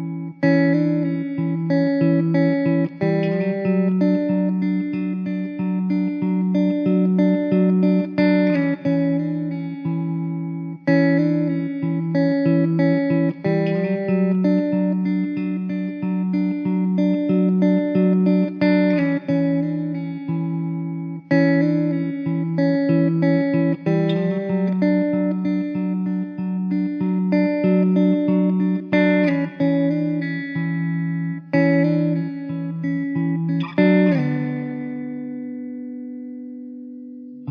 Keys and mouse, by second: 0.2 middle click, 2.6 alt+w, 3.8 middle click, 6.8 middle click, 8.0-9.4 typing, 12.3 KP_5, 12.4 Return, 14.3 middle click, 16.0 2, 32.0 ctrl+z, 33.3 ctrl+z.